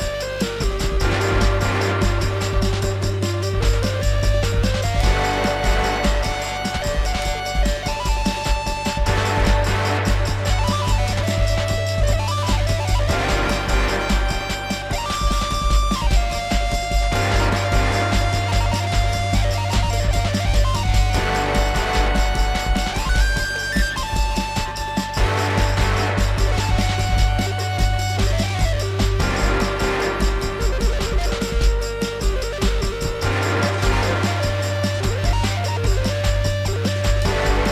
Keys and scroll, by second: 7.0 alt+x, 9.6 F4, 13.1 alt+w, 14.3 F3, 24.7 F4, 32.5 alt+w, 37.2 F4.